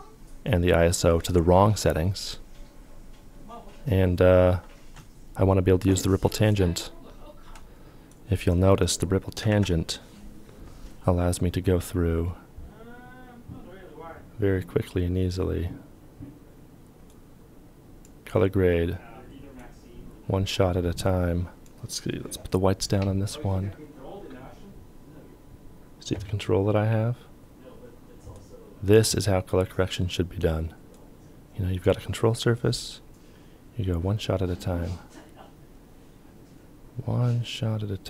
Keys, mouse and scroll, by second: 7.8 ctrl+a, 7.8 ctrl+click, 9.3 ctrl+p.